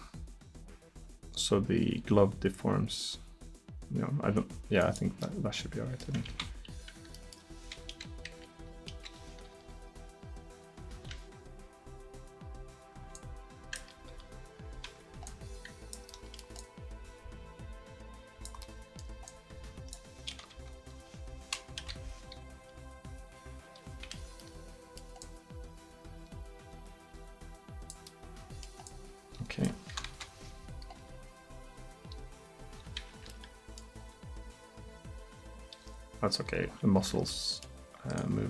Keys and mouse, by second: 5.3 middle drag, 6.3 ctrl+z, 8.0 KP_1, 8.4 KP_3, 8.9 KP_1, 9.6 r, 13.2-14.2 drag, 14.2 r, 19.1 right drag, 19.3 drag, 20.6 KP_7, 21.8 KP_1, 22.7 r, 24.4 middle drag, 25.3-28.1 drag, 30.1 KP_7, 31.0 r, 34.0 r, 37.4-38.1 middle drag.